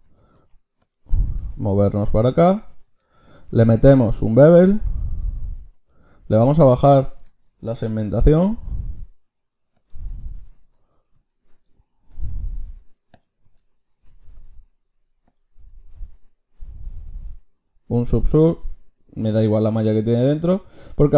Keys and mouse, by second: 1.2 g, 3.4 ctrl+shift+q, 13.2-15.4 drag, 13.9 ctrl+shift+q.